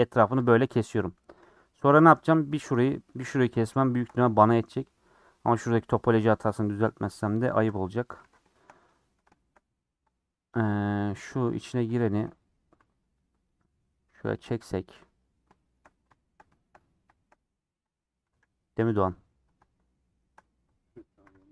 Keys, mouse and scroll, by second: 0.4 click, 0.6 middle click, 1.0-1.9 scroll down 2, 1.9 3, 2.2 click, 2.4-4.0 middle drag, 4.0 shift+Left, 4.5 middle click, 4.6-5.0 scroll up 4, 5.7 KP_1, 5.8 KP_3, 6.3 KP_3, 6.7 scroll up 3, 7.3 ctrl+middle click, 7.8-8.2 scroll up 4, 8.5 shift+middle click, 8.6-9.2 scroll up 7, 9.3-10.6 shift+middle drag, 10.6 click, 11.4 click, 11.6 g, 12.3 g, 15.3-16.1 scroll down 10, 15.5 shift+middle click, 16.1 shift+middle click, 16.7-17.4 scroll up 8, 17.1 shift+middle click, 18.1 click, 18.2 g, 19.7-21.0 shift+middle drag, 21.0 click, 21.2 g.